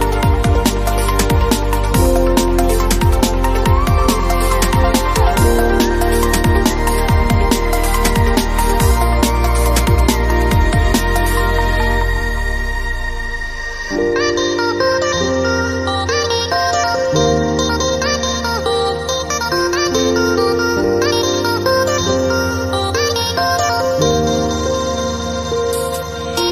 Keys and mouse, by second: 0.0-2.8 typing, 2.0-2.4 drag, 3.6 ctrl+l, 3.9 g, 4.1 s, 5.4 click, 6.7 s, 7.1 g, 8.0 ctrl+l, 8.2 g, 9.2 click, 9.5 ctrl+l, 10.2 g, 11.2 ctrl+Tab, 11.2-11.7 drag, 11.6 g, 12.2 a, 14.0-14.4 drag, 14.4 ctrl+l, 14.8 ctrl+Tab, 15.2 ctrl+l, 15.5 s, 16.4 click, 16.5 ctrl+l, 16.6 g, 17.2 click, 17.4 ctrl+l, 17.5 g, 18.4-19.5 drag, 19.3 ctrl+l, 19.5 s, 21.4 g, 22.3 ctrl+l, 22.5 g, 23.3 h, 23.5 ctrl+z, 23.8 ctrl+l, 24.0 g, 25.4 ctrl+l, 25.8 ctrl+l, 26.0 g.